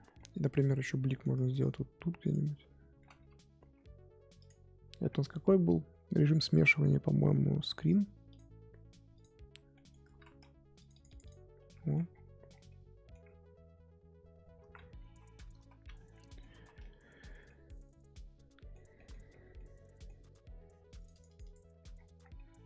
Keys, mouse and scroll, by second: 0.0-1.1 scroll down 2, 0.1 middle click, 1.1 scroll down 2, 1.1-2.2 middle drag, 2.2 click, 2.9 ctrl+z, 3.6 f, 8.5-9.7 drag, 9.7 middle click, 10.1 ctrl+z, 10.8 click, 11.6 middle click, 12.1-12.7 scroll down 10, 12.7 middle click, 13.2-13.9 scroll up 5, 13.9-14.6 scroll up 1, 14.6 ctrl+z, 15.1 ctrl+z, 15.5 ctrl+z, 15.9 middle click, 16.5 ctrl+z, 16.8 middle click, 17.3 scroll up 2, 17.4-18.7 middle drag, 18.7 scroll down 1, 18.9 middle click, 19.3 scroll up 2, 19.5-21.0 middle drag, 21.0 click, 21.9-22.3 scroll down 10, 22.3-22.6 middle drag.